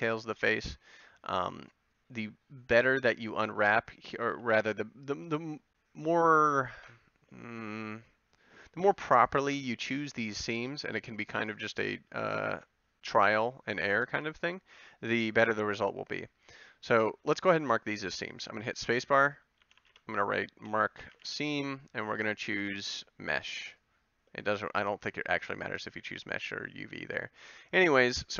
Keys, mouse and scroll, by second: 3.5-8.8 middle drag, 18.8 space.